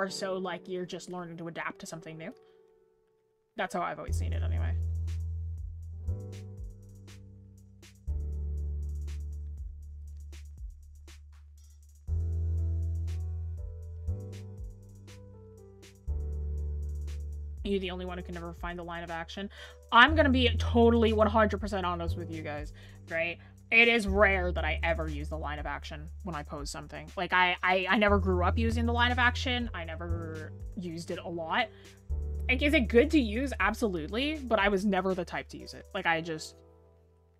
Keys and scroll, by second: 1.7-2.1 scroll up 1, 2.8-3.6 scroll down 1, 3.7 scroll up 1.